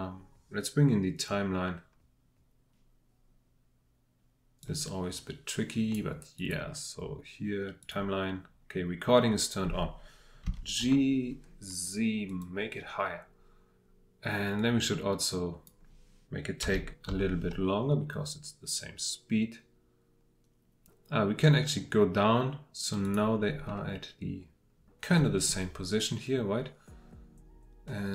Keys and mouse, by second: 10.4 g, 10.8 z, 12.3-13.3 drag, 14.7-16.6 drag, 16.6 g, 17.1 z, 23.7-28.1 drag.